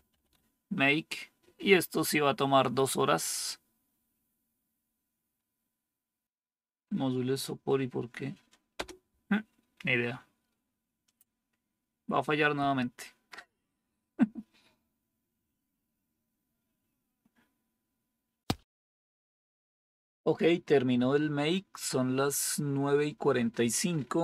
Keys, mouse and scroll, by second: 0.0-0.6 typing, 8.7 Return.